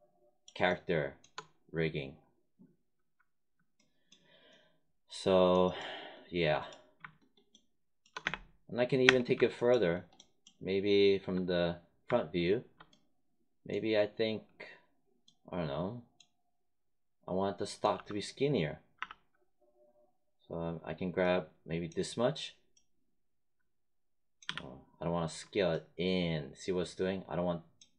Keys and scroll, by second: 8.1 space, 17.8 t, 18.9 r, 24.4 z.